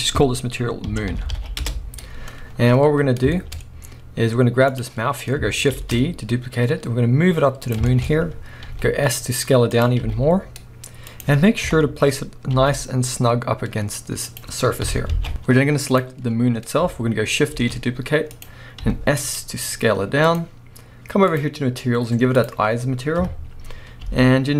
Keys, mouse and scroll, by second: 1.2 o, 1.7 Return, 3.3-4.7 shift+middle drag, 4.7 click, 5.1-5.7 scroll up 1, 5.7 shift+d, 7.7 click, 7.8-8.4 shift+scroll up 2, 7.9-9.8 shift+middle drag, 8.7 s, 9.8 click, 10.0 g, 11.2 click, 11.6 KP_3, 12.5 g, 14.3 click, 14.9 KP_1, 15.1 alt+a, 15.3-15.9 middle drag, 15.3-15.9 scroll up 2, 15.9 click, 16.2-17.6 scroll down 1, 17.6 shift+d, 18.4 click, 18.8 s, 20.4 click, 21.3-24.5 drag, 23.2 KP_3, 23.8 scroll up 1, 24.0 g.